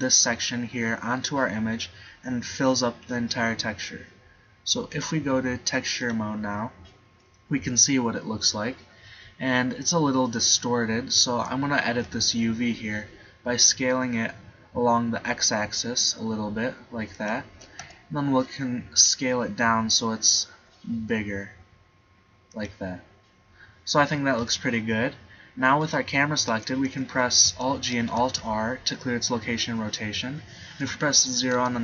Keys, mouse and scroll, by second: 6.2 click, 6.8 middle click, 12.1 s, 17.9 s, 22.8-24.0 drag, 24.6 Tab, 28.2 alt+g, 28.3 alt+r, 31.7 KP_0.